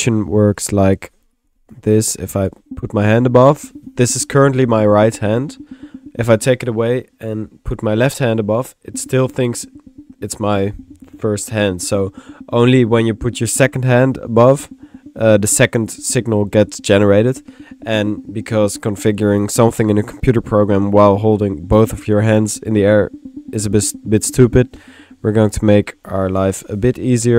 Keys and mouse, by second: 0.0-0.6 typing, 1.3-2.4 drag, 25.6-26.8 drag, 26.4 typing.